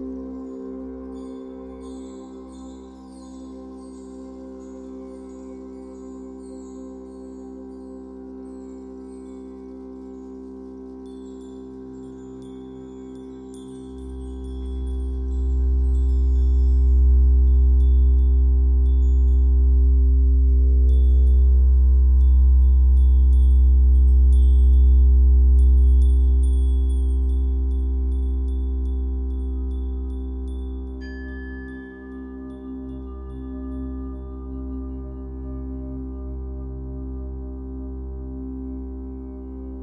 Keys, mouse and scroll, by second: 0.9 scroll down 1, 1.7-2.4 scroll up 2, 4.0-6.3 ctrl+drag, 5.6 ctrl+z, 6.0 scroll up 1, 6.3-8.8 shift+middle drag, 6.5-7.1 scroll up 1, 8.8-19.9 drag, 19.6 scroll down 1, 19.9-23.4 shift+middle drag, 20.4 scroll down 1, 21.2-21.8 scroll up 1, 23.0 f, 23.4 click, 23.7-25.7 shift+middle drag, 24.1-24.6 scroll up 2, 24.6-25.7 scroll down 2, 25.7-27.8 drag, 29.2-35.9 drag, 36.0-39.8 shift+drag.